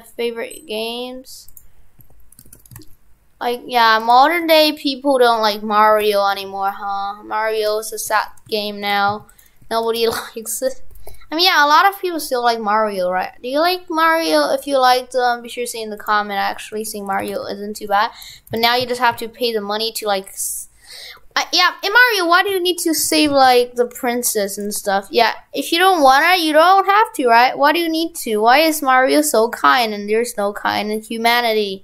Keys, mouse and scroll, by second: 2.0 Tab, 2.5 shift+f, 4.4 Tab, 8.7 shift+f, 9.6 Tab, 17.2 shift+f, 23.0 shift+f.